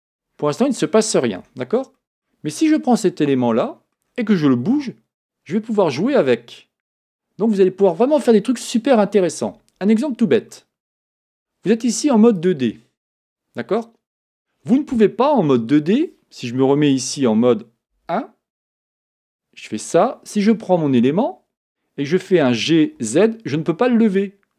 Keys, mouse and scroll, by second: 0.5 middle click, 1.4 Tab, 2.0 middle click, 2.9 click, 3.4-4.7 middle drag, 4.7 g, 10.5-12.3 middle drag, 12.3-15.3 drag, 17.9 KP_1, 19.1 Tab, 22.4 g.